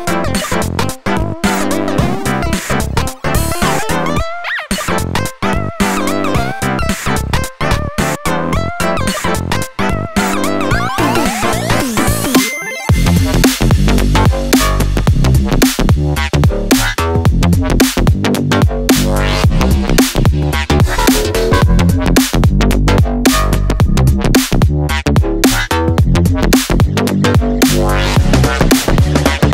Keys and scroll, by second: 20.2 9, 20.2 9, 20.4 Return.